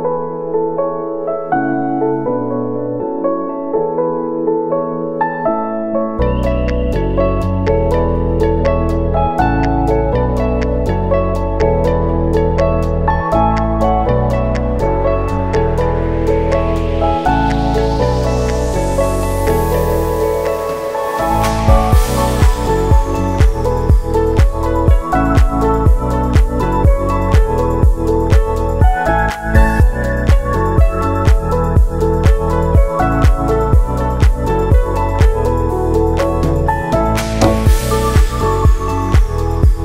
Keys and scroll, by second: 22.9 ctrl+shift+d, 25.6 ctrl+s, 27.4 space, 34.0 space, 34.3 ctrl+s, 39.6 r.